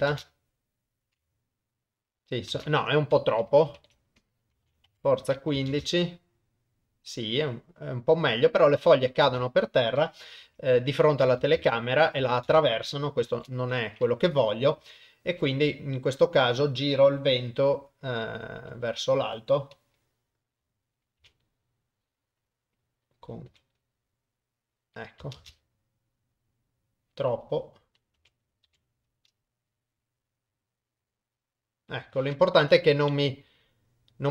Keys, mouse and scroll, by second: 0.1 shift+space, 3.5-5.0 drag, 5.7 shift+space, 9.3 shift+space, 10.5 KP_0, 11.6 shift+space, 13.3 shift+Left, 14.8 KP_0, 15.9 middle click, 18.6 r, 25.4 shift+space, 28.2 r, 32.7 KP_0.